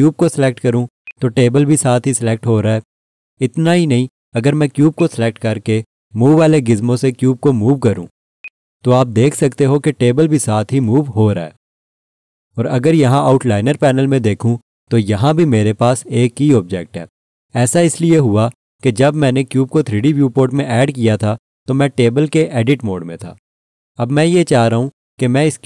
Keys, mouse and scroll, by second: 4.3 click.